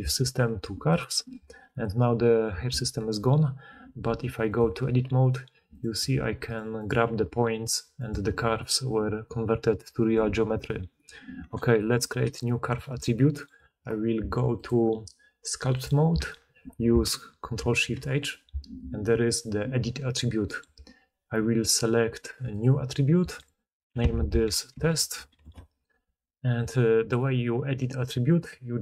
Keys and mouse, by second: 3.8 Tab, 4.5-5.6 drag, 4.8 g, 5.7 click, 5.9 g, 6.8-28.8 drag, 7.0 g, 10.8 Tab, 17.5 ctrl+shift+h.